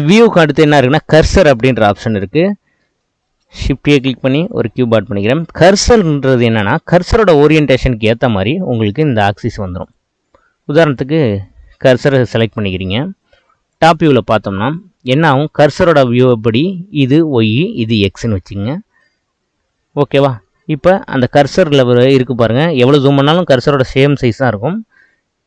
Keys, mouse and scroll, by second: 0.0-2.5 drag, 2.5-3.3 shift+middle drag, 3.3 shift+a, 5.0-5.8 middle drag, 5.8 scroll down 4, 6.3-9.9 middle drag, 9.9-12.3 drag, 12.3-13.8 middle drag, 13.8 click, 14.6-15.3 scroll up 5, 15.3-18.3 shift+middle drag, 19.1-22.0 middle drag, 22.0-22.4 scroll up 4, 22.8-23.2 scroll down 2, 24.1-24.6 scroll down 7.